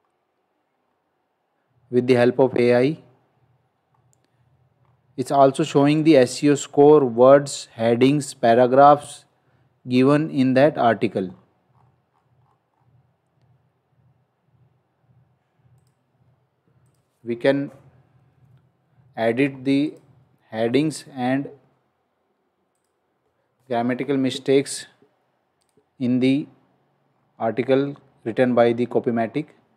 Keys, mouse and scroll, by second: 3.8-4.7 scroll up 1, 9.2-9.6 scroll down 1, 11.6-12.7 scroll up 1, 15.8 click, 17.6 BackSpace, 18.3 shift+c, 20.7 shift+?, 22.7 click, 23.8-24.4 scroll down 1, 25.6 click, 27.1 scroll down 1.